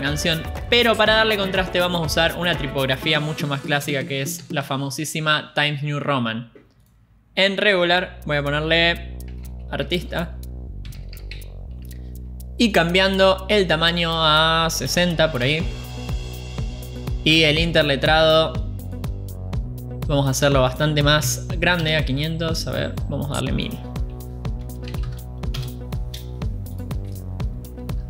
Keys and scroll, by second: 5.4-6.2 typing, 10.6-12.8 typing, 16.1-16.9 typing, 16.9 Return, 22.8 typing, 23.3 Return, 26.2-26.5 typing, 27.0 Return.